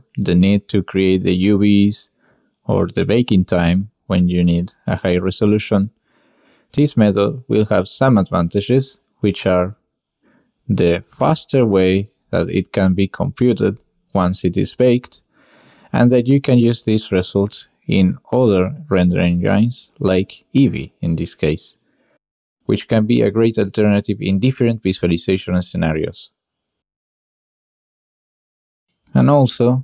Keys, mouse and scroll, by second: 5.7-9.5 drag, 10.0-10.6 drag, 10.9-11.2 drag, 11.4 shift+drag, 12.0-12.4 drag, 12.6 click, 13.1 shift+click, 13.8 drag, 14.6-15.1 drag, 15.1-15.9 middle drag, 16.5-16.8 middle drag, 17.1 shift+middle drag, 17.4-17.8 middle drag, 18.0-18.9 middle drag, 19.0 shift+middle drag, 19.8-20.4 middle drag, 20.5 shift+middle click, 21.6 r.